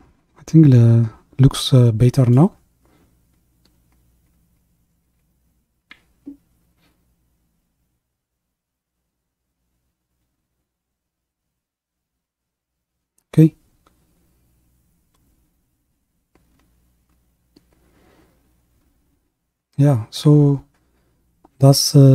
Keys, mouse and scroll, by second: 0.1-3.3 middle drag, 4.9-5.5 scroll down 2, 5.5-7.1 middle drag, 7.1 KP_1, 8.1-9.4 scroll up 3, 13.3-17.3 middle drag.